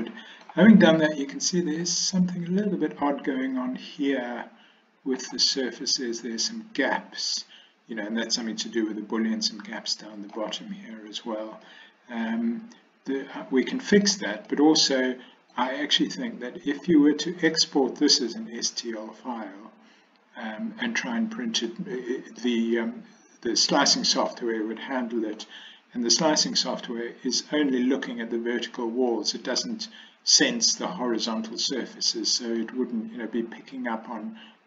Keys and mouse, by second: 1.1-1.9 middle drag, 3.6-5.3 middle drag, 6.5-10.4 middle drag, 11.7-14.2 middle drag, 14.6-15.7 middle drag, 16.1-16.9 middle drag, 21.8-22.5 middle drag, 24.4-25.5 middle drag, 29.2-29.7 middle drag, 32.2-32.7 middle drag, 34.1-34.6 middle drag.